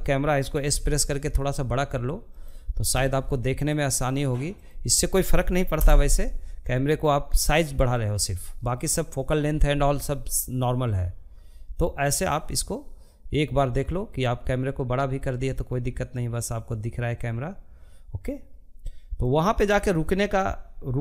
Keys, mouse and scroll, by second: 1.8-3.8 drag, 3.8 KP_0, 5.6-8.5 drag, 17.2-21.0 drag.